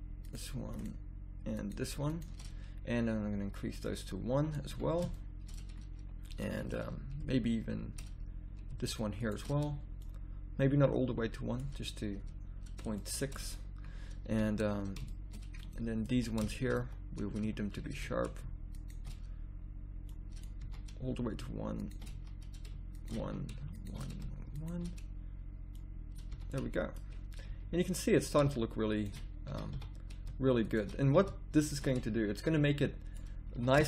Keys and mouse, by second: 2.4-4.7 middle drag, 4.7 a, 5.5 middle click, 8.0 middle click, 10.0-11.8 middle drag, 13.0 middle click, 13.9 middle click, 14.3 a, 15.8 middle click, 16.1 z, 16.8 z, 17.4 z, 18.0 z, 20.6 a, 22.1 z, 23.2 z, 26.3 a, 27.5 z, 29.5 a, 29.8 z, 32.6 middle click, 33.5 a.